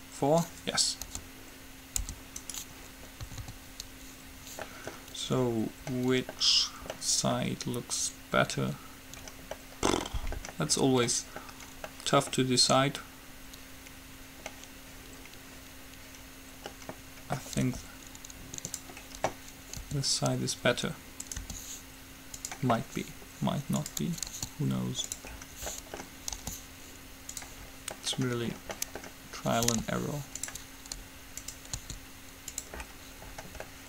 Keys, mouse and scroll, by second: 0.0-1.2 drag, 2.2 u, 3.5 a, 3.6 a, 17.8 r, 20.0 r, 21.5 g, 22.9-24.0 middle drag, 24.0-25.7 drag, 24.5 s, 26.5 g, 29.9 g, 31.6-33.4 drag, 32.0 s.